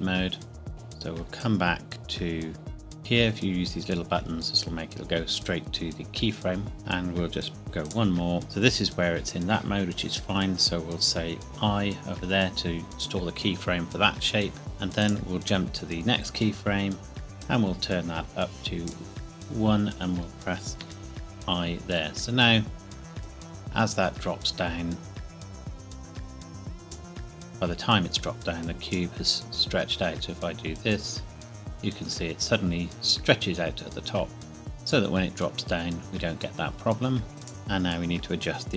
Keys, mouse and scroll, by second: 1.4 click, 7.9 click, 11.5 i, 15.0 click, 17.4 click, 20.8 i, 23.2 click, 29.5 scroll down 1, 30.7 click.